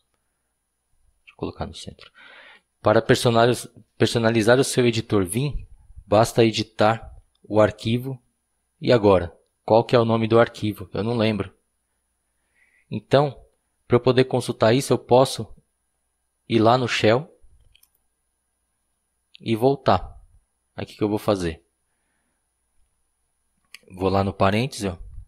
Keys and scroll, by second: 1.6 typing.